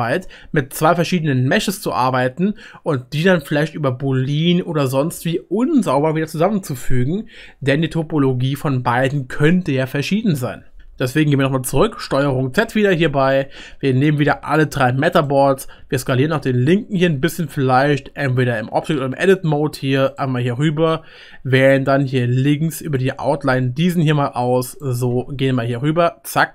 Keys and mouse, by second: 12.1 ctrl+z, 15.1 click, 15.8 s, 21.8-24.0 middle drag, 22.8 click, 23.5 s, 24.9 g.